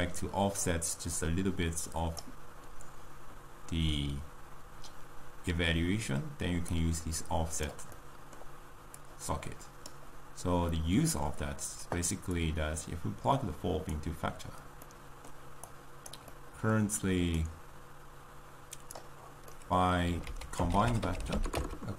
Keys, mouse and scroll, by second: 2.3-21.9 drag.